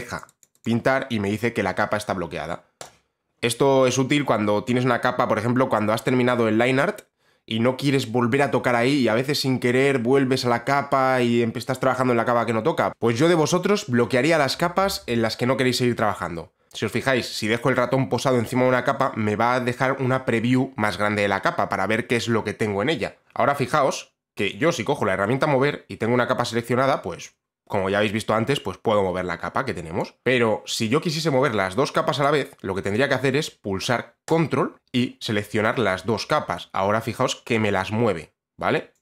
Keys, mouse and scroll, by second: 0.0 click, 0.3 click, 0.5 click, 0.7 click, 2.9 click, 23.3 click, 30.1 click, 32.4 click, 34.4 ctrl+click, 38.9 click.